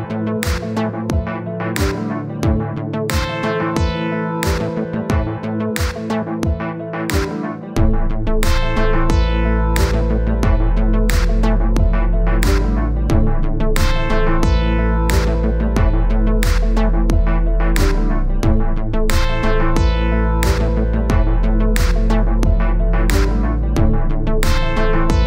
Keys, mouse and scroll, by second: 0.3 click, 1.4 middle click, 2.0 click, 2.6 middle click, 3.2 click, 3.6 middle click, 4.3 click, 4.9 scroll down 1, 4.9 middle click, 5.3-7.2 drag, 7.2 scroll up 2, 7.4 scroll down 3, 7.6-8.8 middle drag, 9.3 click, 9.5 middle click, 9.8 click, 10.3 middle click, 11.0 click, 11.2 scroll up 1, 11.5 middle click, 11.7-13.0 drag, 13.2-14.4 drag, 15.8-16.2 scroll down 1, 17.1-17.4 scroll down 9, 17.4-18.4 scroll up 1, 18.4-18.8 scroll up 1, 18.8 click, 19.4 click, 19.8-20.2 scroll up 2, 20.2 click, 21.0 scroll up 2, 21.7 click, 22.3-23.6 scroll up 1, 23.8-24.4 scroll up 1, 24.4-25.2 drag.